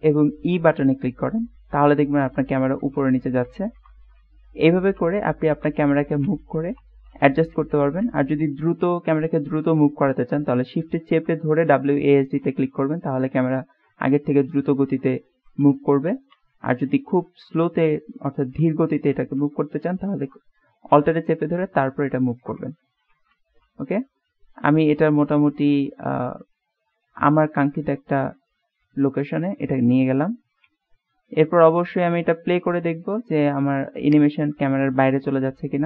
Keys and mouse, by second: 17.7-34.2 shift+middle drag.